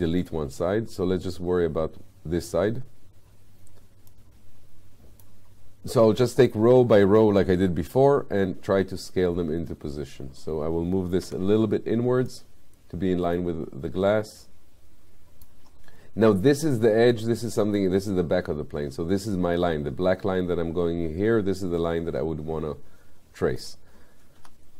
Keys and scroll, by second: 11.3 w, 24.4 r.